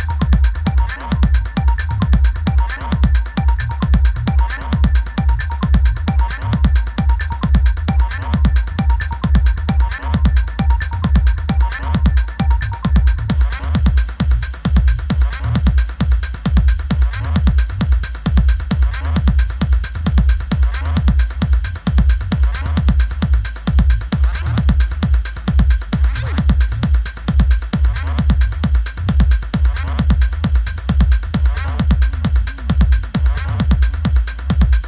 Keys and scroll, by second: 22.0 i.